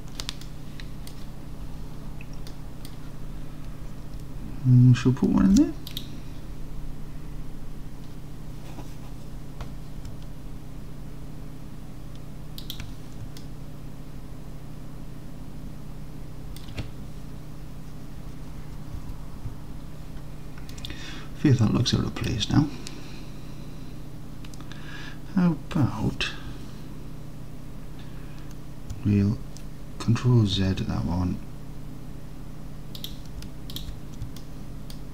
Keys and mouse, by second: 0.5 click, 0.8 click, 2.5 middle click, 2.8 middle click, 5.5 ctrl+r, 12.7 shift+click, 13.5-16.7 alt+drag, 20.9-22.4 alt+drag, 30.6 ctrl+z, 33.1 click, 34.4 alt+click.